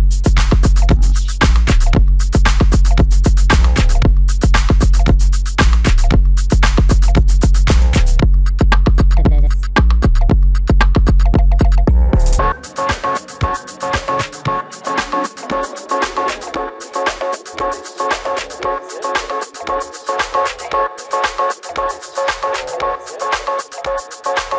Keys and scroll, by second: 1.7 space, 1.9 Escape, 3.6 Escape.